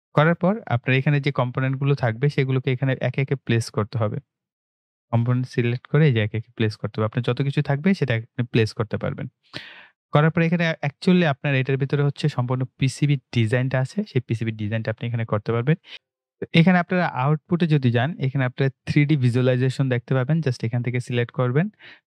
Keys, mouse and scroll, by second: 0.6 click, 3.9 click, 6.8 scroll up 1, 15.9 click, 17.3 click, 20.7 click.